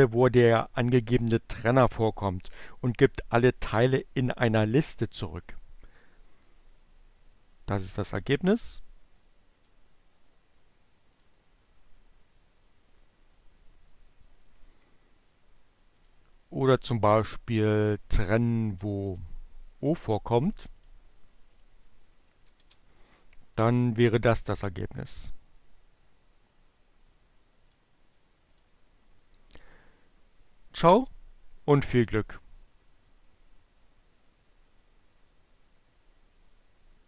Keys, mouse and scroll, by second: 6.4-9.8 drag, 10.2 click, 15.3 click, 17.7 o, 20.5 click, 21.5 click, 22.4 Up, 22.7 Return, 25.4-27.8 drag, 28.0 click.